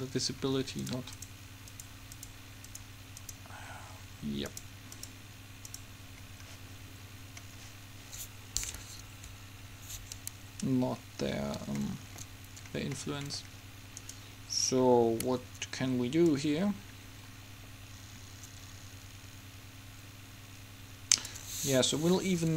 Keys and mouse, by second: 3.8-7.7 middle drag, 9.1 Home, 16.4-18.1 drag.